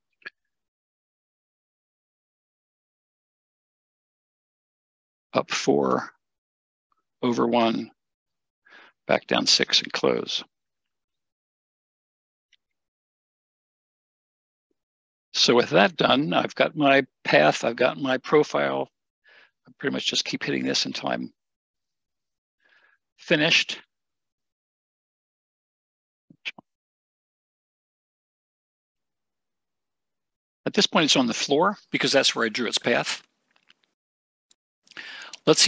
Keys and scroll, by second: 10.5 Escape, 14.8 Escape.